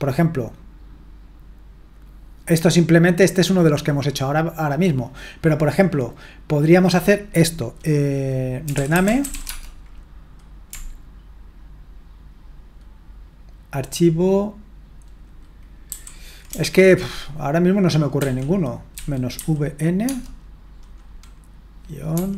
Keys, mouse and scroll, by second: 5.1-5.9 scroll down 1, 5.9-8.6 drag, 8.4-10.1 typing, 15.9 shift+y, 18.2-20.0 typing.